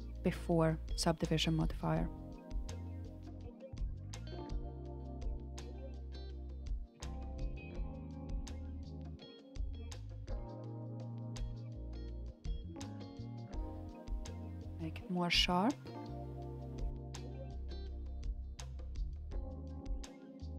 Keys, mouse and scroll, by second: 0.0-0.7 drag, 2.4-3.7 drag, 4.8-8.1 drag, 9.0-12.0 middle drag, 12.5 alt+shift+click, 13.6 KP_1, 14.4 click, 17.1 g.